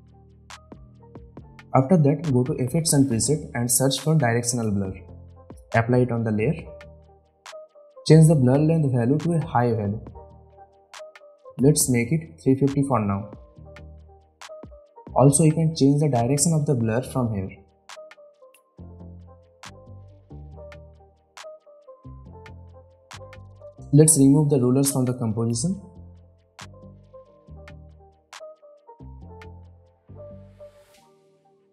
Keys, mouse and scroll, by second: 3.5-4.9 typing, 5.6 click, 8.8-9.4 drag, 14.0 Return, 16.0-19.1 drag, 23.7 ctrl+r, 24.9 click.